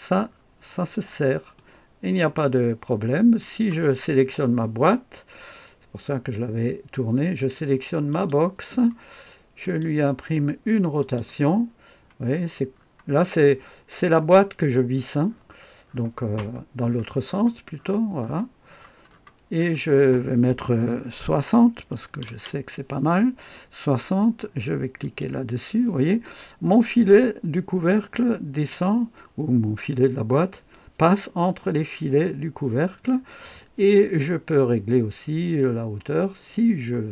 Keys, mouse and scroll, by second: 0.2-1.1 scroll down 1, 1.1-2.4 scroll up 2, 1.6-2.6 right drag, 3.4 click, 8.1 click, 9.6 click, 11.0 click, 11.7-13.5 scroll down 2, 14.0-15.0 scroll down 1, 15.3-22.0 scroll up 1, 22.0 KP_6, 22.2 KP_0, 25.0 click.